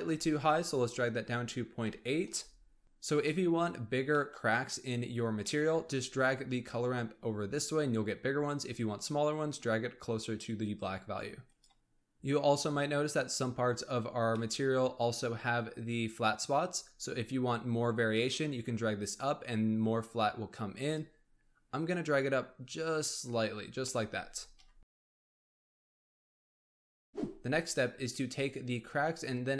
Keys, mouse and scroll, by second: 2.8-3.1 scroll down 4, 3.1-5.6 middle drag, 5.6-6.7 scroll up 7, 6.7-9.9 drag, 11.6 click, 11.7-13.2 middle drag, 13.9-14.3 scroll up 1, 14.3-16.2 middle drag, 16.2-16.7 scroll down 2, 16.7-18.0 scroll up 1, 18.0-23.7 drag, 23.7 scroll down 2, 23.9-24.4 middle drag, 24.4 KP_1.